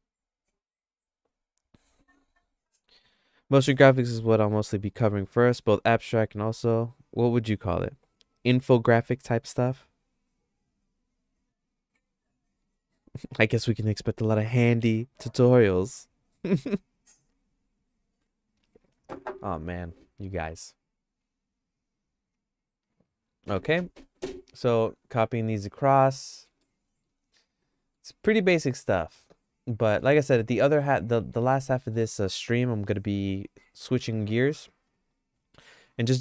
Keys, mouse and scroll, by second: 25.4 click, 25.8 click, 26.3 middle click, 26.7 shift+middle click, 27.7 middle click, 28.2 middle click, 28.5-30.0 shift+middle drag, 30.3 click, 31.7 middle click, 32.4-33.6 shift+middle drag.